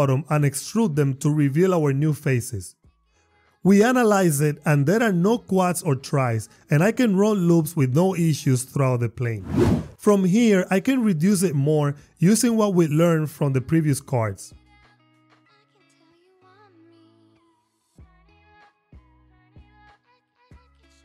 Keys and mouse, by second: 0.8 e, 1.2 y, 3.4 click, 4.6 click, 7.7 ctrl+r, 9.6 Tab, 11.9 click, 14.5-16.8 typing, 15.1 shift+click, 15.3 shift+click, 16.5 click, 17.7 Return, 18.4 shift+click, 18.7 e, 18.8 y, 19.1 click, 20.9 ctrl+r.